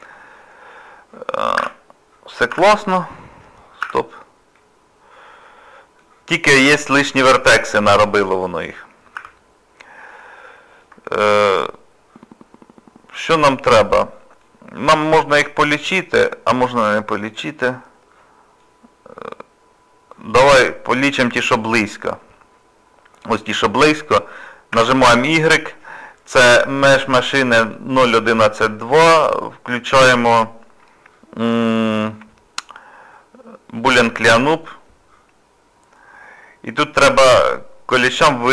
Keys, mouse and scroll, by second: 0.2 scroll up 1, 1.0 scroll down 1, 1.6 1, 1.9 scroll down 2, 2.5 z, 3.0-3.8 scroll down 3, 3.8 z, 4.6 middle click, 6.1-6.9 scroll up 5, 6.9 middle click, 7.5 shift+middle click, 9.2 z, 9.7 scroll down 1, 10.2 middle click, 11.1 shift+middle click, 11.5 middle click, 16.6 middle click, 19.3 scroll up 1, 19.4 scroll down 1, 19.7 scroll up 1, 19.7 scroll down 1, 20.0-20.4 scroll up 3, 20.7 middle click, 21.6-22.5 scroll up 1, 22.5-23.4 scroll down 1, 24.7 y.